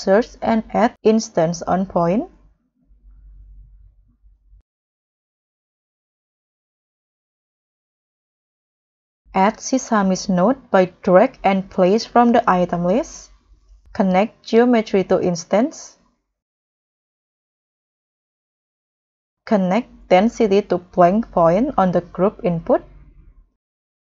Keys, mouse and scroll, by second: 1.1-2.1 typing, 5.8-6.5 scroll down 10, 6.5-7.2 scroll up 6, 8.1-8.9 scroll down 6, 8.9-10.4 scroll down 1, 15.9 scroll down 10, 16.2 scroll up 4, 18.3-18.7 scroll down 8, 18.7-19.5 scroll up 8.